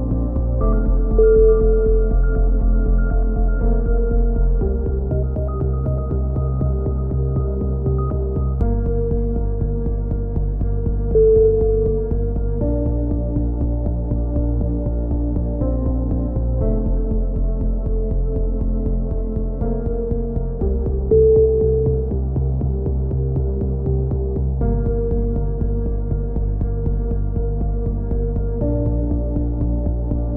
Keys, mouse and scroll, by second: 1.1-2.1 right drag, 1.6 shift+s, 3.3 KP_3, 4.3 a, 5.6 click, 7.1 t, 8.2 click, 16.6 t, 17.4 r, 19.5 s, 20.6 click, 21.5 s, 27.2 middle click, 27.5 click, 27.8 middle click, 28.1 click, 28.7 z, 29.1 middle click, 29.4 a, 29.6-30.3 drag.